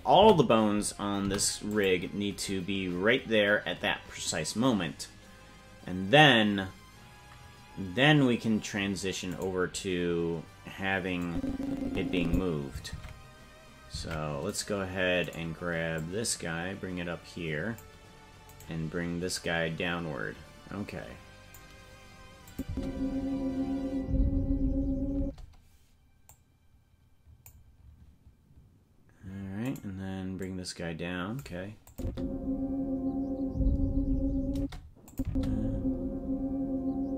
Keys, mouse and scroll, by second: 0.2 a, 1.2 i, 9.4 right click, 11.2-12.4 drag, 12.9 ctrl+Tab, 14.0 ctrl+Tab, 14.6 right click, 15.3 right click, 15.9-17.8 drag, 18.6 right click, 19.3-21.6 drag, 22.5 click, 22.6 space, 25.2 space, 26.3-27.5 drag, 29.7 right click, 30.4-31.4 drag, 31.9 click, 32.0 space, 34.5 space, 35.1 click, 35.2 space.